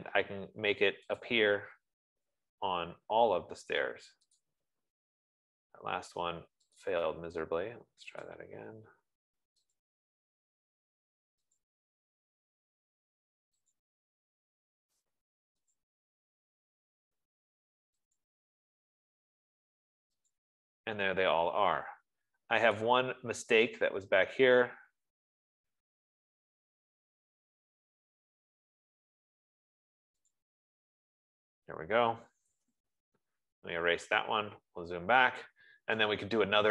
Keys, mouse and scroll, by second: 0.0-0.6 typing, 3.7 click, 4.9 click, 7.4 click, 8.6 click, 10.3 click, 12.1 click, 14.0 click, 16.4 click, 18.7 click, 20.7 click, 21.4 Escape, 22.3 Escape, 23.3 click, 26.7 Escape, 28.8-29.1 scroll, 30.9 click, 32.8-33.6 typing, 35.0 middle click.